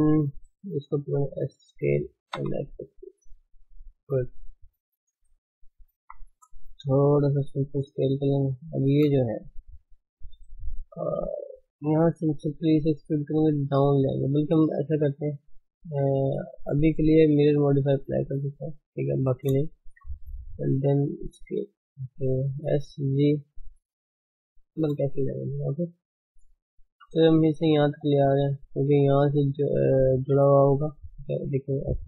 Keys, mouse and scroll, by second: 0.5 alt+shift+click, 1.0 s, 4.5 a, 6.0 s, 8.3 click, 8.7 alt+shift+click, 9.0 scroll down 5, 9.4 shift+middle click, 9.7 shift+z, 10.3-10.7 scroll up 1, 10.7 shift+z, 11.0-11.4 scroll down 2, 12.3 e, 14.3 Tab, 15.3 ctrl+space, 17.7-19.2 drag, 19.2 ctrl+space, 19.7 shift+middle click, 20.1 Tab, 20.4-20.8 scroll up 1, 20.8 s, 22.7 s, 25.5 shift+middle click, 26.0 scroll up 1, 26.3-26.9 shift+middle drag, 26.9 g, 30.8-32.0 middle drag.